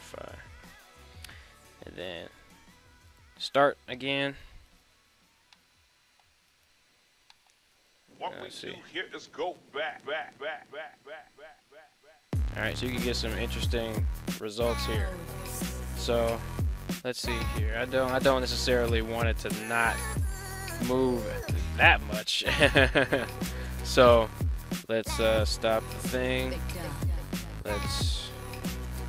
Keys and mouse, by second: 2.4 click, 3.1 click, 3.9 middle click, 4.9 right click, 5.5 middle click, 6.1 middle click, 6.7 right click, 7.4 middle click, 7.8 r, 14.8 right click, 16.2 right click, 17.7 r, 18.2 right drag, 19.0 right click, 19.3 r, 20.3 right click, 21.6 right click, 22.2 right click, 24.6 drag, 25.1 click, 28.3 right click.